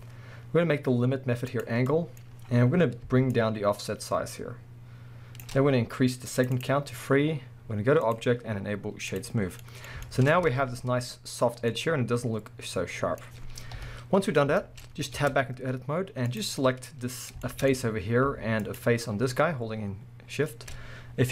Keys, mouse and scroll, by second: 0.9-1.5 scroll up 1, 1.5 click, 1.9-3.3 middle drag, 2.2-3.3 scroll up 2, 3.3-9.6 shift+drag, 9.5 scroll down 1, 9.6-16.3 middle drag, 10.3 scroll up 2, 10.5 alt+a, 11.6 scroll down 1, 13.8 KP_1, 14.4 scroll down 2, 15.1-16.3 scroll up 4, 15.2 Tab, 16.3 click, 16.6-18.6 middle drag, 17.7-18.6 scroll up 2, 18.6 shift+click.